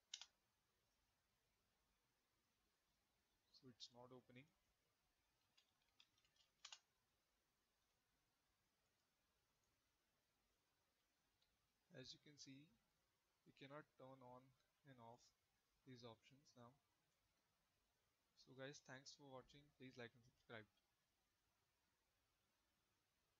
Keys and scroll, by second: 0.0 Return, 5.0-6.9 typing.